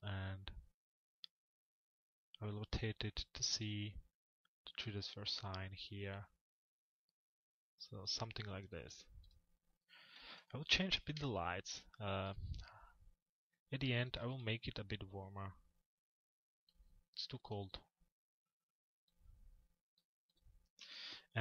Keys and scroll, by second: 9.9 p, 20.4 c.